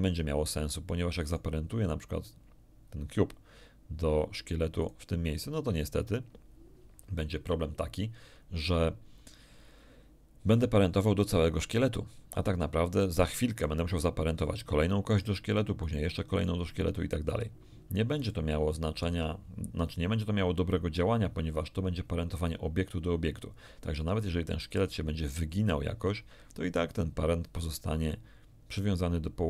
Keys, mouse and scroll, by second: 1.2 right click, 4.7 right click, 13.5 right click, 15.1 right click, 15.8 right click, 16.3 right click, 17.5-18.0 scroll down 1, 18.3 shift+middle click.